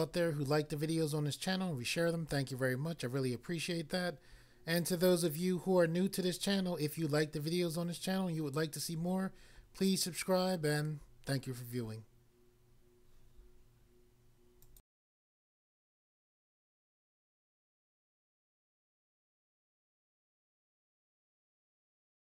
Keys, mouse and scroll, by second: 14.6 click.